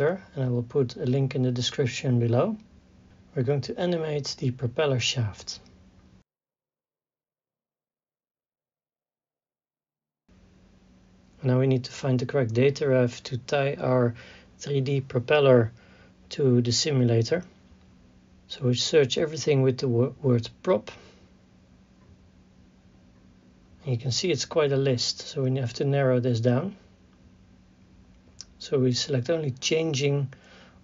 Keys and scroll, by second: 4.8 i, 5.9 Right, 8.5 KP_3, 8.7 KP_6, 8.8 KP_0, 9.1 Return, 12.0 KP_3, 12.1 Left, 12.4 Right, 14.1 Left, 15.3 Right, 17.0 Left.